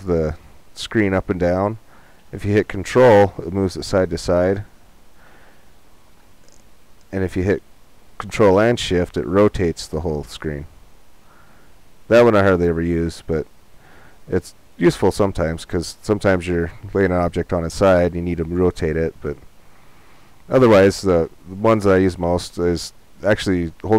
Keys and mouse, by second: 10.4 middle click, 13.8 middle click.